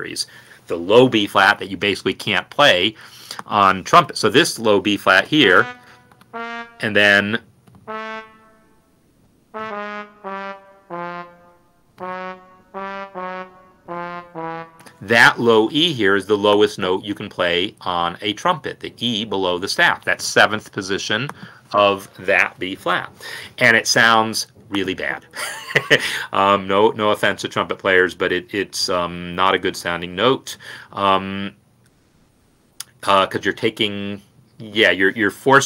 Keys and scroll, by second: 4.7 n, 8.0 a, 9.8 Down, 9.8 a, 10.3 g, 11.0 f, 11.9 Up, 12.7 Up, 13.1 Down, 13.8-14.3 typing, 15.0 Escape.